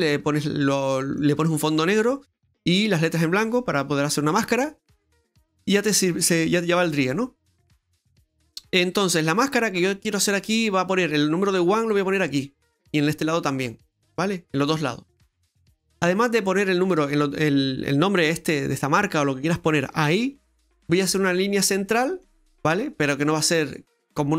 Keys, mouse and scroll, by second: 0.7 middle click, 13.0 middle click, 21.3-21.7 scroll down 1, 21.7 middle click.